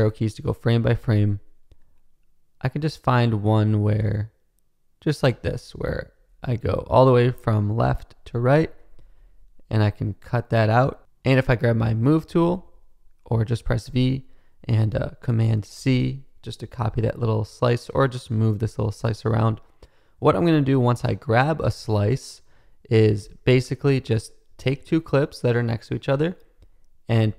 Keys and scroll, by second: 5.5 Right, 6.1 Left, 7.4 shift+c, 8.6 shift+Right, 9.1 Right, 13.8 v, 15.7 super+c, 23.2 BackSpace.